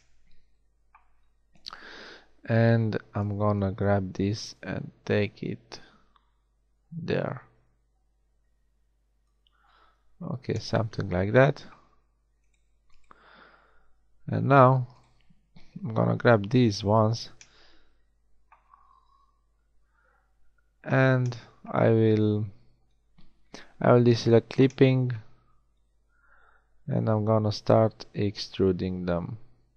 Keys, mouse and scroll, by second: 1.5-2.9 drag, 3.3 b, 9.8 a, 14.3 g, 16.6 KP_1, 21.3 middle click, 21.5 middle click, 23.9-26.5 middle drag, 26.5 e, 28.6 e.